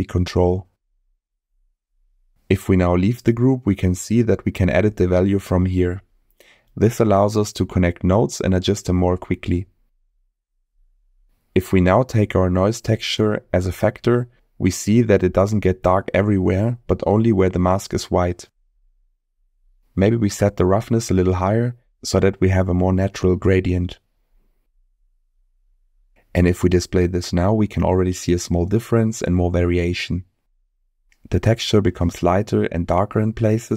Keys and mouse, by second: 3.2 click, 5.4-8.1 drag, 9.3 click, 10.3 middle click, 12.7 click, 12.9-13.6 drag, 14.8 ctrl+shift+click, 15.8-16.2 drag, 17.8 middle click, 22.7-24.6 drag, 26.4 middle click, 28.3 ctrl+shift+click, 29.3 middle click, 32.0 click, 32.9 m, 33.5 m.